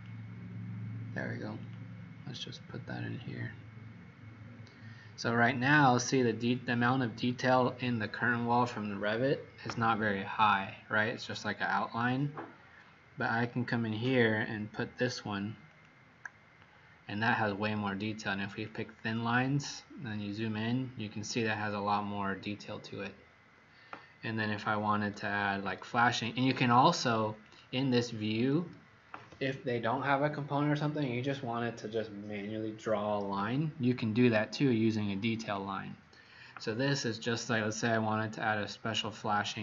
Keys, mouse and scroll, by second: 4.2-4.6 scroll up 6, 15.6 click, 20.0-23.6 scroll up 6, 24.9 Escape, 27.4 click.